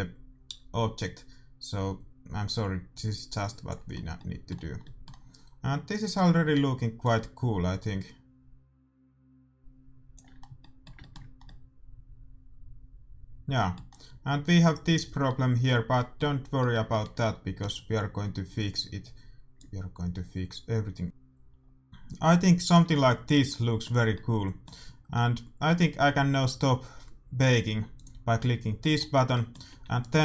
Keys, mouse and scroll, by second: 4.2-7.1 middle drag, 7.1-8.8 drag, 10.4-13.2 middle drag, 13.8-18.9 middle drag, 19.8-21.0 drag, 23.0-26.9 middle drag, 27.9-29.8 drag, 28.7-30.2 middle drag, 29.7 a, 30.0-30.2 right drag.